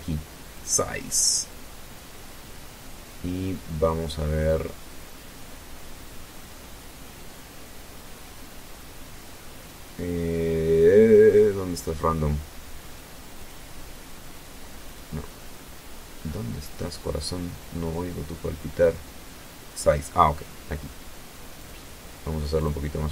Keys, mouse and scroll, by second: 7.5-7.9 scroll down 1, 8.5 scroll down 2, 11.6 click, 13.0 click, 14.3-14.7 scroll up 1, 19.7 click, 20.7 click.